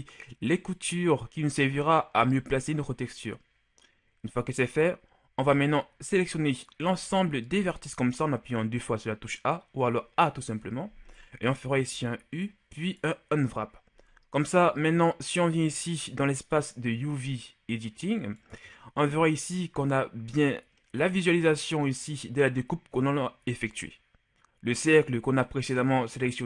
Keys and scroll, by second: 7.3 a, 12.3 u.